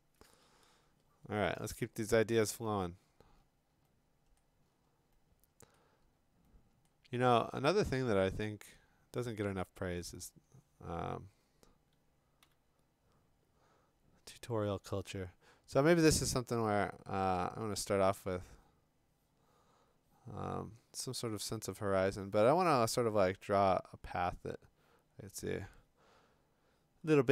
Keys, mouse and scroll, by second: 2.1-2.7 scroll down 5, 2.7 scroll up 3, 3.0-3.7 scroll, 4.4-5.0 scroll, 5.7-6.2 scroll, 7.3 scroll, 8.9-9.3 scroll, 10.0 scroll, 12.4 b, 12.6 click.